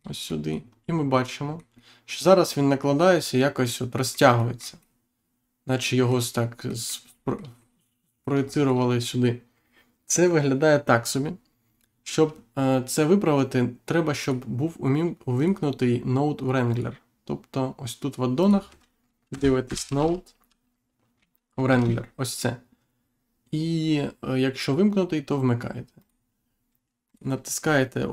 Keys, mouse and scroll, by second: 0.2 middle click, 0.6-1.0 scroll up 1, 1.1 middle click, 4.3 shift+middle click, 6.6 middle click, 7.0 shift+middle click, 8.4 shift+middle click, 14.1 click, 15.3 click, 16.6 click, 18.3 click, 19.2 n, 19.6 o, 19.8 d, 19.9 e, 21.6 space, 25.9 click, 27.0 click.